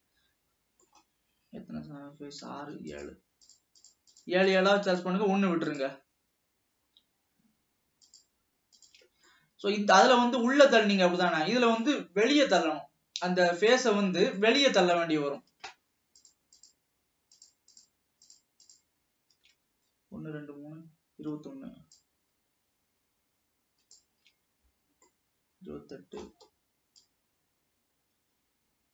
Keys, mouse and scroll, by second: 3.2 shift+click, 3.7 shift+click, 4.3 shift+click, 4.6 shift+click, 5.8 shift+click, 8.2 shift+click, 9.0 shift+click, 9.4-12.5 middle drag, 12.7 click, 13.6-14.0 scroll up 2, 14.3 scroll down 1, 14.6-16.4 middle drag, 16.8 shift+click, 17.5 shift+click, 18.4 shift+click, 22.1 shift+click, 24.8 scroll down 1, 25.3-27.2 middle drag, 27.2 shift+click.